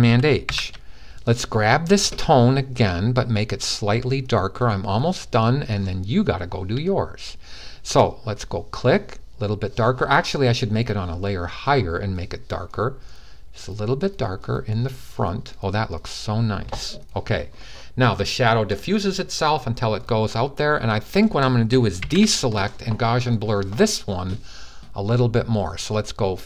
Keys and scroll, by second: 0.2 h, 21.7 super+d.